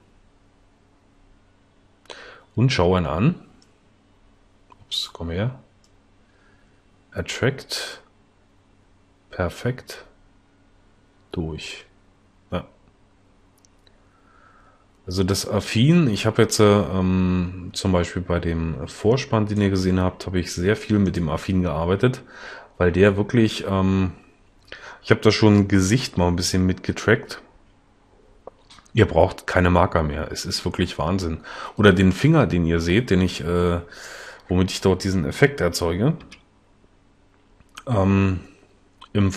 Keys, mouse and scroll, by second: 36.4 l.